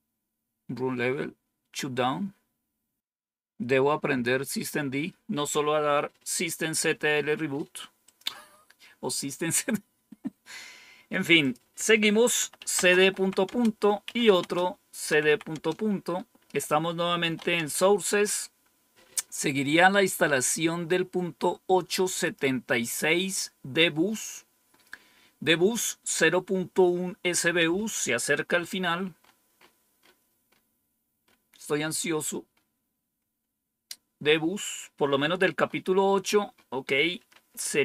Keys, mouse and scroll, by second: 0.1-0.9 scroll down 2, 3.0 scroll down 1, 4.2-5.0 scroll down 2, 8.0 click, 11.4 click, 12.2-15.2 typing, 15.5 Return, 17.2-17.6 typing, 22.2 click, 27.4 click, 29.1 scroll up 2, 31.2 scroll up 2, 34.7-36.0 scroll down 8, 36.5-37.3 scroll down 2.